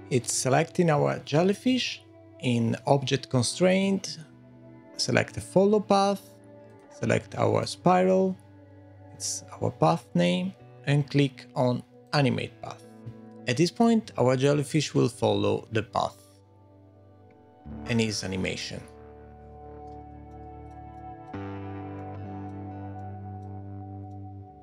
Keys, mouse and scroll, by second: 0.2 click, 1.7 click, 3.7 click, 6.7 click, 12.0 click, 19.9 space, 20.3 middle click, 20.9 shift+middle click, 21.3-21.7 scroll up 1, 21.7 scroll down 1, 21.9 middle click, 23.7 scroll down 1, 24.1 middle click.